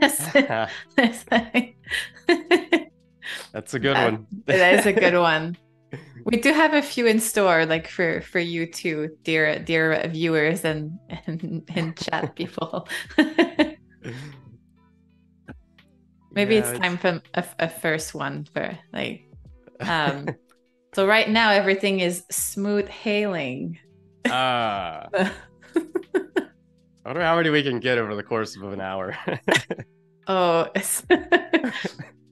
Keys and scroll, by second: 0.0 super+z, 1.5 BackSpace, 2.8 super+f, 3.7 space, 4.8 i, 5.5 a, 5.9 space, 7.9 super+y, 9.3 p, 14.5 z, 15.5 a, 18.3 super+-, 19.2 space, 20.8 z, 21.3 a, 24.9 super+-, 26.7 space, 27.4 super+=, 27.6 space, 30.0 super+y.